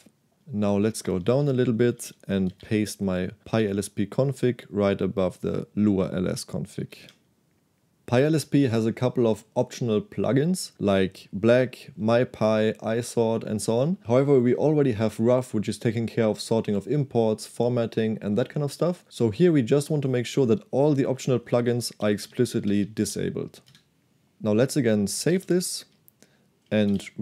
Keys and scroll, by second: 0.9-3.5 typing, 6.6-7.5 typing, 21.3-23.4 typing, 23.8 Escape, 25.2 shift+z, 25.4 shift+z, 26.4-27.2 typing.